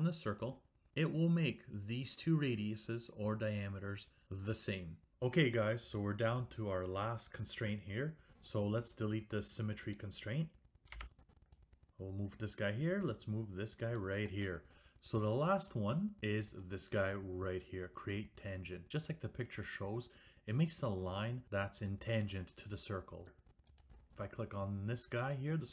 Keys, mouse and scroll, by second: 0.4 click, 10.1 click, 11.9 click, 14.1 click, 14.9 right click, 23.9 click.